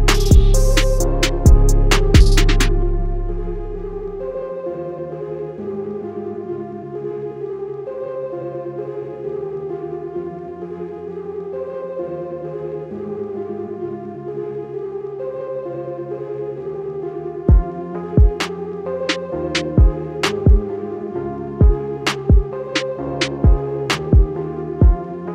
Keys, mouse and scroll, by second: 0.9-3.0 scroll down 1, 4.3-6.7 scroll down 1, 8.7-13.9 scroll down 1, 14.8-16.9 scroll down 1, 19.9-22.8 scroll down 1.